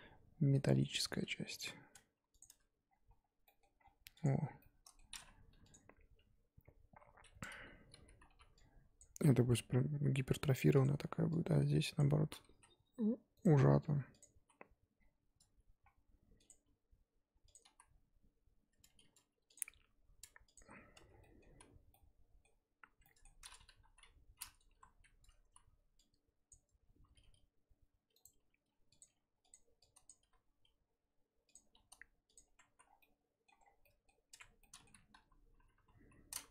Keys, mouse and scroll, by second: 1.4 g, 2.4 Tab, 3.2 scroll down 6, 3.4 middle click, 3.8-4.2 scroll down 1, 4.2 click, 4.3 scroll down 3, 4.6 middle click, 5.0-5.7 scroll up 1, 5.7 click, 6.6 scroll up 1, 6.8 KP_1, 7.1-7.6 scroll up 1, 7.7 scroll up 3, 7.9 z, 8.3 1, 9.0 Left, 9.1 z, 9.4 s, 11.0 z, 12.0 Left, 12.3 z, 12.5 s, 14.1 click, 14.4 s, 16.6 g, 17.7 z, 19.0 r, 19.5 g, 20.9 Tab, 21.0 scroll down 2, 21.2 middle click, 21.4 z, 21.9 middle click, 22.8 Tab, 23.0 middle click, 23.7 KP_3, 24.0 scroll up 1, 24.7 KP_1, 25.0-25.5 scroll up 2, 25.5 z, 26.5 click, 27.1 r, 28.3 r, 29.0 g, 30.0 click, 30.2 r, 31.6 g, 32.4 Tab, 32.7 z, 32.8 scroll down 1, 33.0 middle click, 33.5 scroll up 1, 33.6 scroll down 3, 33.8 middle click, 34.3 Tab, 34.6 middle click, 35.1 KP_1, 35.7 KP_3, 36.1-36.5 scroll up 2.